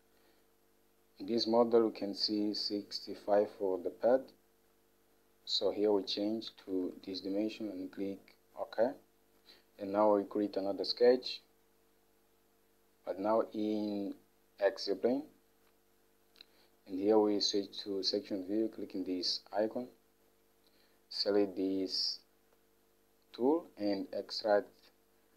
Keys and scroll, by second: 6.8-7.7 typing.